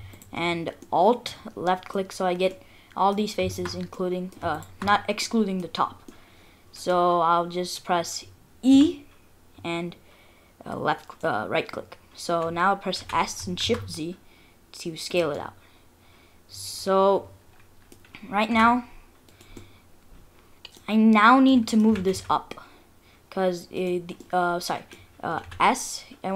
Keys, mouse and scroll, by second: 0.1 alt+click, 0.8 middle click, 1.3 middle click, 2.0-2.5 scroll up 3, 2.5 middle click, 3.5 shift+click, 3.9 middle click, 4.6 shift+click, 5.2 middle click, 6.1 middle click, 7.2-7.6 scroll down 2, 7.6-7.9 scroll up 2, 7.9-8.3 scroll down 2, 8.7 e, 13.0 s, 15.4 middle click, 17.6 middle click, 18.0 scroll down 1, 18.5 s, 19.6 middle click, 21.1-21.5 scroll up 3, 21.5 middle click, 21.9 g, 24.5 middle click, 25.4 s.